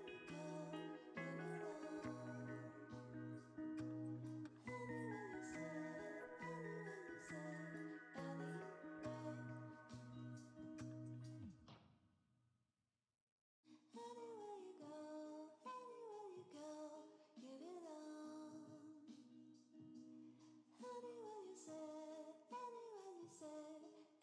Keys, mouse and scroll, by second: 1.9 m, 5.3 m, 8.2 double click, 8.6 shift+click, 10.2 alt+d, 11.9 shift+d, 13.5 right click, 15.8 alt+d, 16.6 g, 16.7 z, 17.9 r, 18.0 z, 20.1 g, 21.2 s, 21.9 s.